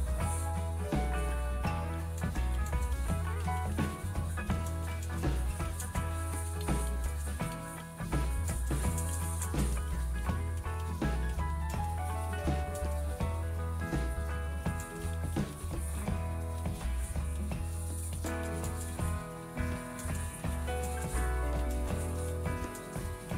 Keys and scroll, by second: 0.0-23.3 typing.